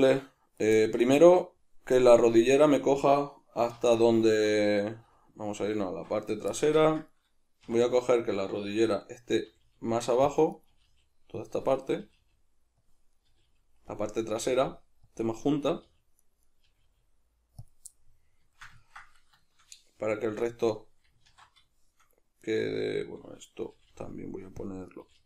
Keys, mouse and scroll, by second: 2.5 right click, 3.8 alt+q, 6.5-7.9 ctrl+shift+middle drag, 7.7 1, 7.9 right click, 9.5 g, 10.3 click, 10.5 right click, 10.7 g, 11.5 click, 11.9 right click, 12.1 g, 12.9 click, 13.1 right click, 13.3 g, 14.0 click, 14.3 right click, 14.4 g, 15.3 click, 15.5 right click, 15.7 g, 16.5 right click, 16.7 g, 17.7 click, 17.9-22.5 middle drag, 21.3 alt+q, 22.5 right click, 23.7 g, 24.7 click, 24.9 right click, 25.1 g.